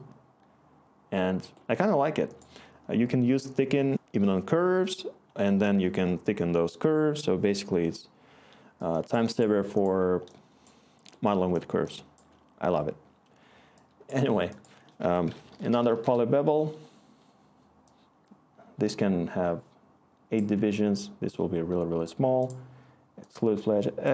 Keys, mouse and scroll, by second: 10.4-12.2 scroll, 15.0-16.2 typing.